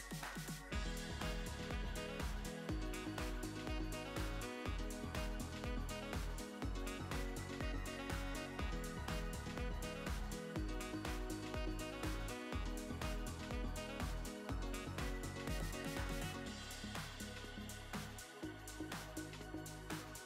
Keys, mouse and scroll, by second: 0.1 KP_1, 0.6 click, 1.6-3.6 middle drag, 3.5 e, 5.8-6.8 middle drag, 6.7-8.9 drag, 8.6 f, 9.3-11.4 drag, 11.0 f, 11.5-14.4 drag, 14.2 f, 14.9 click, 15.4-18.6 middle drag, 18.3-20.2 drag, 19.7 f, 20.1-20.2 middle drag.